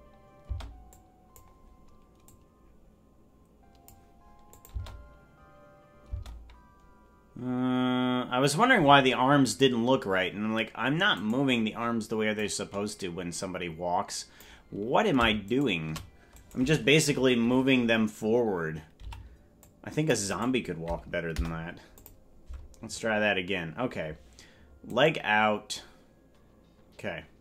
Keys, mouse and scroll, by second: 0.4 space, 0.9 click, 2.2-3.9 drag, 4.5-6.2 drag, 4.7 space, 6.1 space, 11.3-12.3 right drag, 12.3-14.4 drag, 15.6 shift+right click, 16.3-17.5 right drag, 18.9 c, 25.0 Delete.